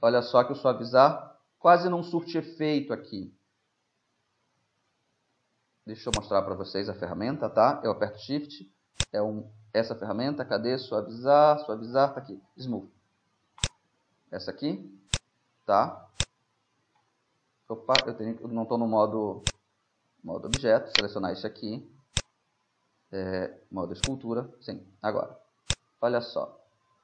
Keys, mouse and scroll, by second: 6.2-8.0 drag, 15.1-18.2 drag, 17.6 Tab, 18.2-19.8 right drag, 18.4 Tab, 19.5-21.4 drag, 20.7 Tab, 21.0-22.8 right drag, 22.2-24.1 drag, 24.7-25.7 middle drag, 25.7-27.0 drag.